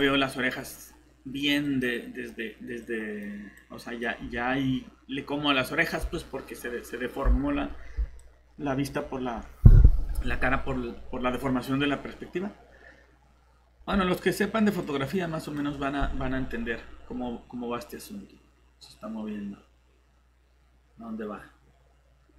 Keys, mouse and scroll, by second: 7.6 scroll down 1, 8.2 click.